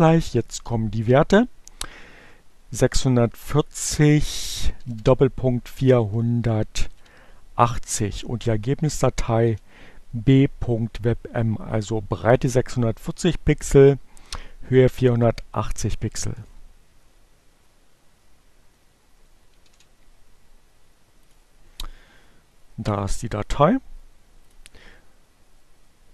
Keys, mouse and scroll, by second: 0.4 Right, 2.6 Delete, 3.2 shift+., 5.3 Right, 6.0 shift+2, 7.7 Right, 7.9 Delete, 15.5 Return, 20.2 ctrl+c, 22.5 click, 23.1 right click, 24.5 click.